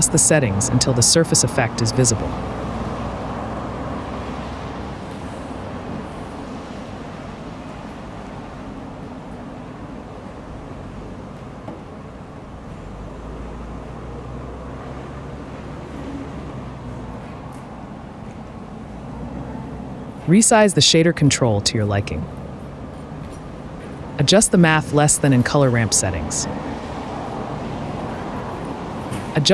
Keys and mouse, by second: 0.9-1.6 drag, 2.1-3.5 right drag, 3.5 shift+click, 4.2 click, 5.0-8.7 drag, 9.2-12.4 shift+drag, 12.9-15.7 shift+drag, 15.9-18.6 shift+drag, 20.1 click, 20.5 click, 20.9 click, 21.7 click, 23.0 n, 23.7 n, 24.2 n, 25.2-25.6 drag, 26.9 click.